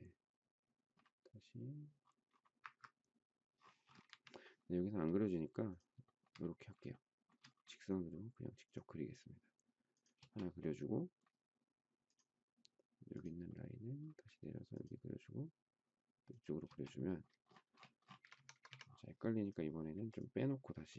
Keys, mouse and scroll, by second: 2.5 Up, 4.1 Escape, 6.0 shift+middle click, 6.9 shift+middle click, 10.1 space, 16.6 space, 18.1 space, 18.2 Escape, 18.4 Escape.